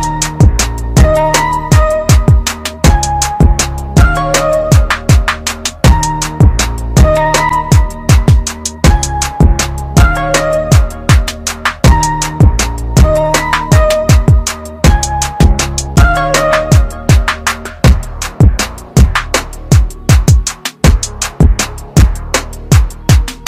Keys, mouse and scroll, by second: 6.2 shift+click, 7.8 shift+right click, 9.6 click, 14.1 click, 16.0 right click, 19.5 click.